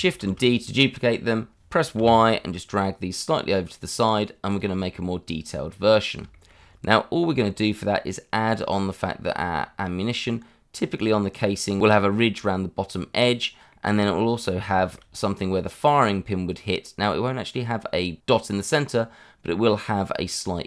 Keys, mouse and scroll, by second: 0.2 shift+d, 1.9 y, 3.9 click, 5.8 scroll up 1, 6.3 shift+middle click, 6.6 scroll up 1, 9.6 scroll down 1, 10.7 scroll up 1, 12.8 scroll down 1, 13.7 middle click, 14.4 scroll up 1, 14.7 shift+middle click, 20.3 middle click.